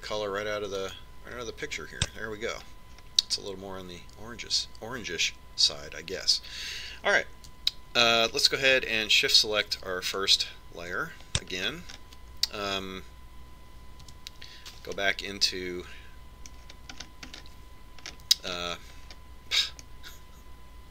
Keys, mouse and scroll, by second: 4.0-6.1 middle drag, 11.3 click, 13.0-15.1 middle drag, 15.3 KP_5, 16.2-18.3 middle drag, 18.8-20.9 middle drag.